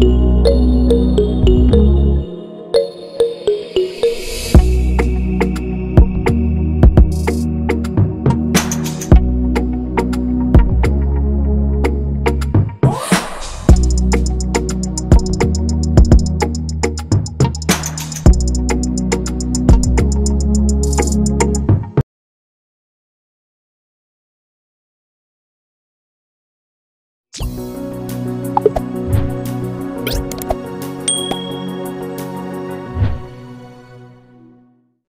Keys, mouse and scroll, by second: 0.9 right click, 5.1 ctrl+-, 5.3 ctrl+-, 5.4 ctrl+-, 5.8 ctrl+=, 5.9 ctrl+=, 6.0 ctrl+=, 6.7 ctrl+-, 6.9 ctrl+-, 7.0 ctrl+-, 19.8 ctrl+=.